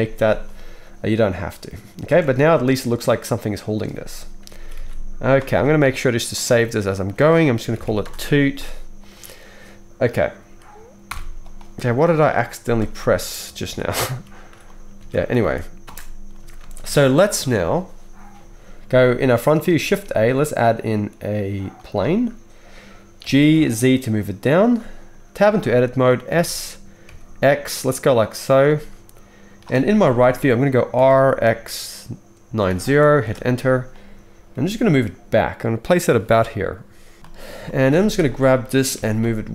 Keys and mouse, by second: 2.1 space, 3.9 space, 4.7 ctrl+s, 5.6-15.1 ctrl+middle drag, 11.1 shift+Left, 11.1-11.9 shift+drag, 12.8 space, 13.2 space, 13.8 ctrl+z, 14.0 ctrl+z, 15.0 alt+a, 15.4 ctrl+s, 15.5 ctrl+s, 15.8 space, 16.6 space, 16.8 KP_1, 19.6-36.3 shift+middle drag, 19.7 shift+a, 23.2 g, 25.4 Tab, 26.3 s, 30.0 KP_3, 30.9 r, 34.5 g, 37.9 alt+a, 38.9 g.